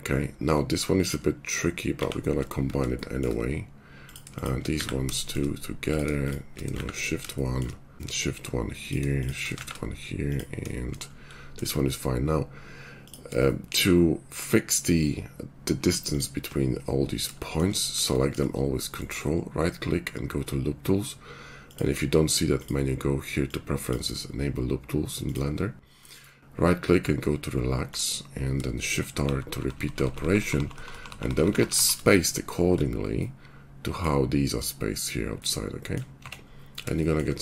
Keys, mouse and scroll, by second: 1.8 shift+1, 4.7 1, 6.7 shift+1, 7.1-10.2 shift+middle drag, 9.7 shift+1, 10.3 shift+middle click, 11.1 right click, 11.3-12.9 middle drag, 12.9 click, 13.0-16.0 shift+middle drag, 16.0 ctrl+click, 16.1-17.9 ctrl+middle drag, 17.9 shift+click, 18.4 middle click, 19.0-21.5 drag, 29.2-31.7 typing, 33.6 click, 33.6-34.7 middle drag, 33.6 right click, 36.2 Tab.